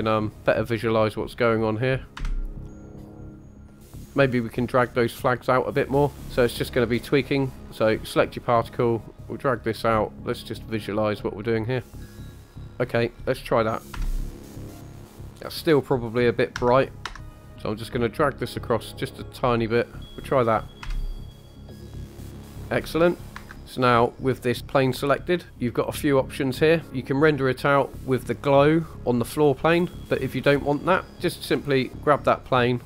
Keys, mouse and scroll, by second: 1.1-2.1 drag, 7.6 click, 8.9-9.8 drag, 11.0 click, 12.1 click, 18.2-19.5 drag, 23.6 click, 26.9 click, 26.9 scroll up 1, 32.1 click.